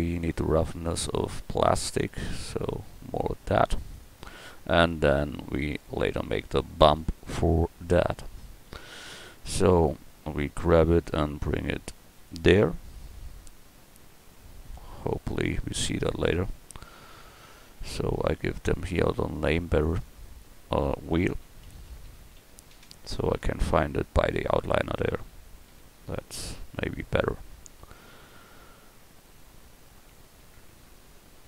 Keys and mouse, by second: 3.9 right click, 5.3-6.7 middle drag, 7.1-8.0 middle drag, 10.7 g, 12.6 a, 17.7 KP_Decimal, 22.0 e, 25.7 a.